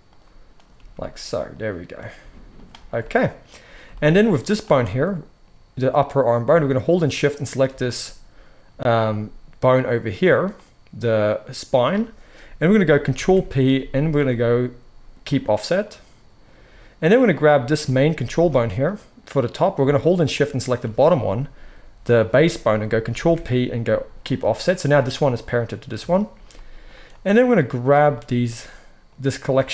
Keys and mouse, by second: 0.7 g, 2.0 click, 2.1-4.4 middle drag, 2.1 g, 4.4 click, 4.5-7.2 middle drag, 7.2 shift+click, 7.5-17.1 middle drag, 13.0 ctrl+p, 17.1 click, 17.2-20.2 middle drag, 17.7 g, 20.2 shift+click, 23.1 ctrl+p, 24.9 click, 26.0-27.0 shift+middle drag, 27.0-29.7 drag.